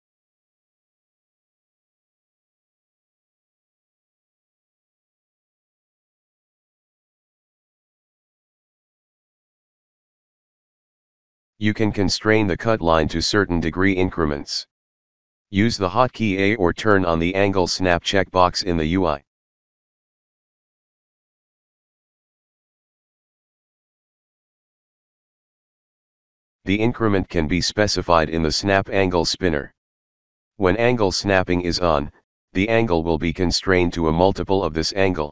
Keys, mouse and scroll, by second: 0.2-1.3 alt+middle drag, 20.2 alt+middle click, 27.6 click, 27.7 click, 27.9 click, 28.0 click, 28.2-31.2 drag, 31.6 click, 31.7 click, 31.9 click, 32.2 click.